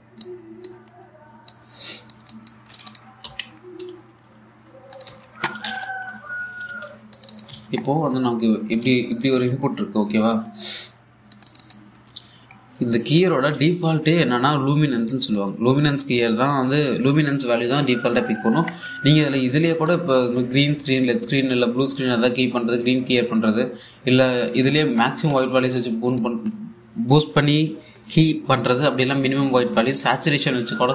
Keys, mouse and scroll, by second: 3.9 k, 5.6 click, 5.7 a, 7.8 click, 8.0 click, 8.2 1, 8.5-9.2 scroll up 1, 9.4-11.9 drag, 11.9 click, 13.1-14.0 scroll up 1, 20.5 click, 25.3 click, 25.6-25.9 scroll up 1, 25.9 click.